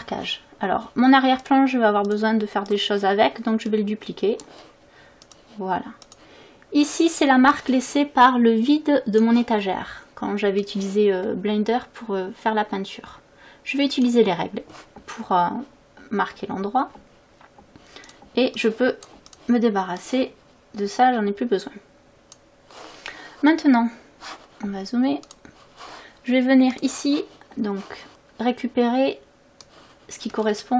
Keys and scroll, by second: 30.6 space.